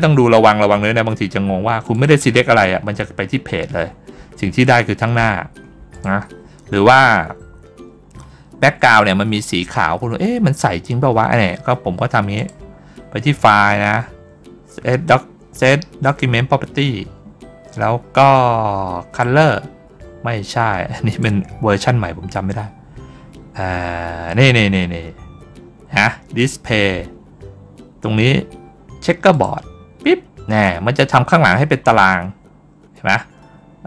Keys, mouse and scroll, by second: 1.8 click, 5.8 click, 7.3 ctrl+scroll down 1, 7.4 ctrl+scroll up 1, 8.3 ctrl+scroll down 1, 9.2 ctrl+scroll up 1, 10.1 middle click, 12.2 click, 15.9 click, 19.0 click, 20.9 click, 29.2 click.